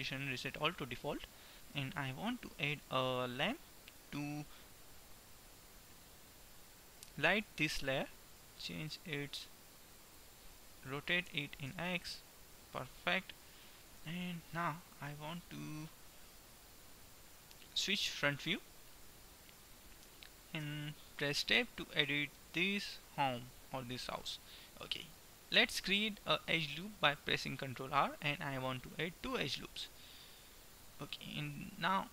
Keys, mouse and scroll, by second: 1.5 middle click, 2.1 shift+a, 7.1-8.1 middle drag, 8.1-11.1 drag, 11.5 r, 13.6 middle click, 15.0-16.8 right drag, 17.5 KP_1, 20.8 Tab, 22.1 a, 24.8 ctrl+r.